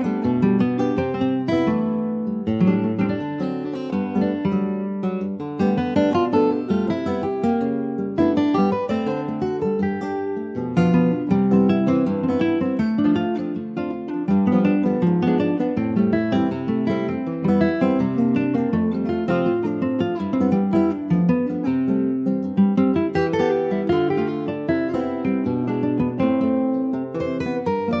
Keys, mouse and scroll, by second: 0.1 ctrl+s, 0.2 click, 0.6 middle click, 0.8 scroll up 1, 0.9 Tab, 1.9 middle click, 2.5 Tab, 2.8 middle click, 3.3 Tab, 3.9 2, 4.3 click, 4.5-5.0 scroll up 2, 5.0 click, 5.7 click, 6.3 alt+shift+click, 7.2 ctrl+b, 12.9 middle click, 13.5 click, 14.9 s, 16.5 middle click, 16.9 ctrl+b, 21.9-23.1 middle drag, 23.1 ctrl+r, 24.3 s, 27.1 middle click, 27.4-28.0 scroll up 1.